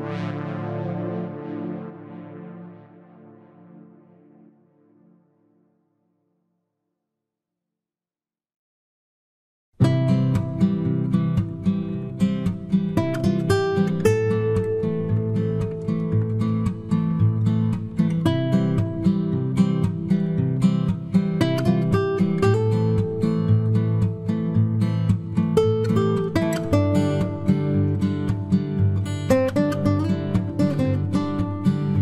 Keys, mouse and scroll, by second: 3.9-6.0 middle drag, 7.5 Tab, 8.9 right click, 9.7 KP_Decimal, 11.6 b, 13.2-14.8 middle drag, 14.8 click, 16.8 ctrl+r, 18.6-20.1 right drag, 19.3 b, 19.7 g, 22.2 ctrl+r, 23.7-25.6 right drag, 24.0 b, 24.3 g, 26.5 ctrl+r, 28.7-30.4 right drag, 29.9 b, 30.2 g, 31.8-32.0 right drag.